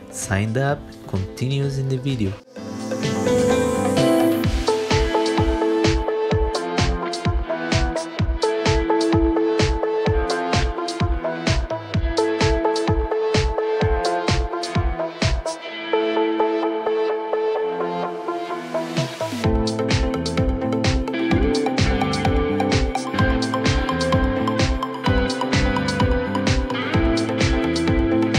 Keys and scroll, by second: 1.5 z, 2.8 alt+1, 10.8 alt+x, 12.5 r, 16.3 ctrl+BackSpace, 18.5 ctrl+shift+c, 24.0 w, 25.0 ctrl+alt+e, 27.9 alt+1.